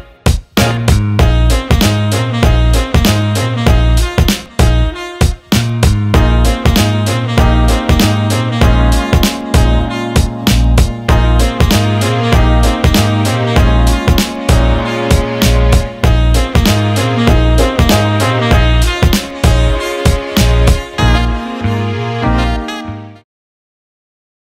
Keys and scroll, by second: 8.8-9.7 typing.